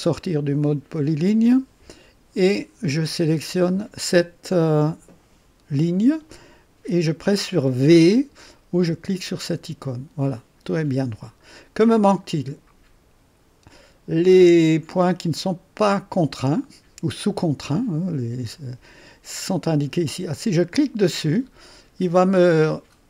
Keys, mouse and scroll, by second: 0.6 middle click, 3.6 click, 9.4 v, 21.1 click.